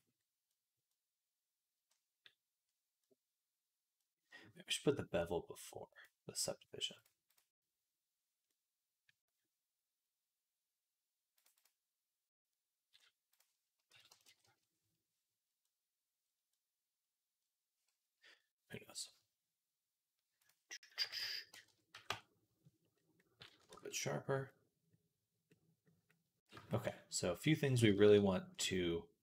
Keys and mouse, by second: 5.9-15.9 right drag, 7.2-15.9 drag, 7.2-15.9 middle drag, 16.1 click, 16.1 middle click, 16.1 right click, 23.6 ctrl+s.